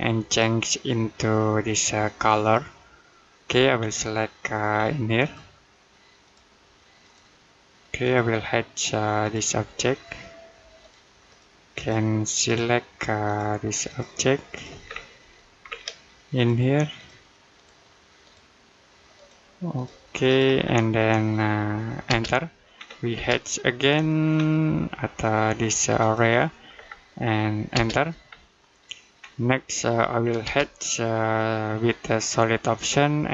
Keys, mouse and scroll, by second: 3.6-5.0 scroll up 1, 5.0 click, 14.7-15.0 scroll down 1, 15.0 middle click, 15.4-16.2 scroll up 1, 16.2 click, 20.5-21.1 scroll down 1, 21.1 middle click, 21.9 space, 22.3 middle click, 22.6-23.0 scroll up 1, 23.0 space, 23.6-25.8 scroll up 1, 25.8 click, 26.6-26.9 scroll down 1, 26.9 middle click, 27.6 space, 28.1-28.4 scroll down 1, 28.4 middle click, 29.0-30.3 scroll up 1, 30.3 space.